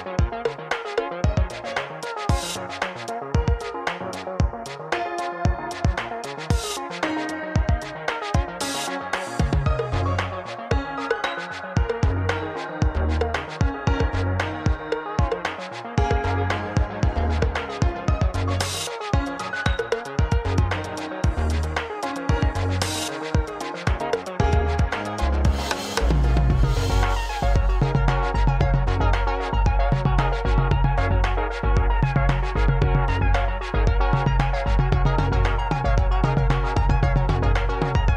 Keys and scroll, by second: 4.6 3, 4.9 KP_1, 5.7 x, 7.9 alt+z, 8.2 alt+z, 9.7 alt+z, 10.0 alt+z, 12.1 KP_1, 13.0 alt+z, 15.1 1, 15.5 alt+z, 18.9 Tab, 20.7 shift+a, 27.9 alt+z, 28.1 alt+z, 28.3 alt+z, 28.4 alt+z, 29.1 alt+z, 29.5 e, 30.5 alt+z, 31.2 s, 31.8 Escape.